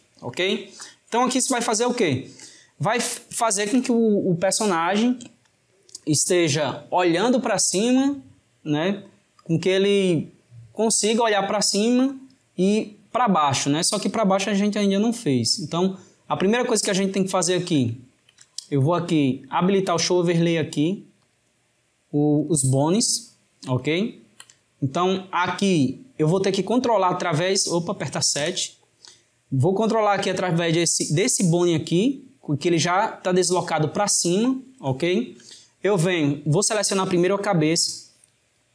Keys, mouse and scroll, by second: 0.9-2.1 drag, 2.1-6.4 ctrl+middle drag, 15.0-19.7 middle drag, 19.7-23.1 drag, 23.1-28.4 shift+middle drag, 28.4 KP_7, 32.2-36.8 shift+middle drag, 36.8 click.